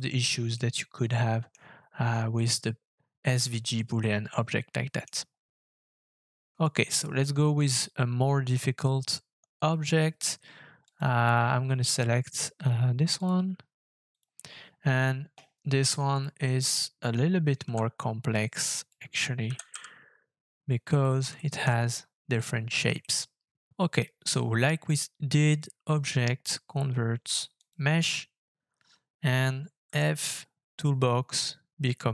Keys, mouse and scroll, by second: 0.5 middle click, 1.8-3.4 scroll down 3, 4.0 shift+middle click, 5.4 scroll down 2, 6.0 shift+middle click, 17.6 s, 19.4 g, 19.7 z, 21.3 shift+middle click, 21.6 shift+scroll up 3, 22.3 middle click, 22.3-22.8 scroll up 1, 23.0 shift+middle click, 29.8 f.